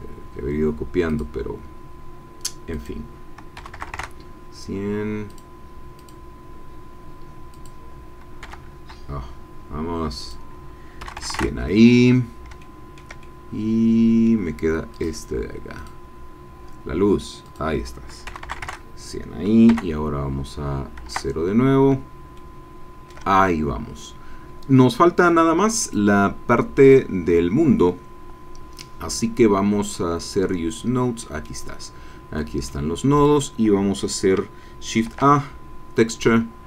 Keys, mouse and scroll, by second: 1.1 click, 2.8 click, 3.5 KP_1, 3.7 KP_0, 3.9 KP_Enter, 5.4 click, 6.0 click, 7.5 click, 8.5 KP_1, 10.2 click, 11.0 KP_1, 11.1 KP_0, 11.3 KP_Enter, 12.6 shift+click, 13.2-14.4 shift+drag, 14.9 click, 15.7 click, 17.5 click, 18.3 KP_1, 18.4 KP_0, 18.7 KP_Enter, 19.6 KP_0, 21.0 KP_0, 22.3 shift+middle click, 23.9 scroll up 2, 25.8 click, 26.8 click, 30.3-31.2 scroll down 2, 31.2 middle click, 31.6-32.3 scroll up 2, 32.3-33.5 middle drag, 35.0 shift+a.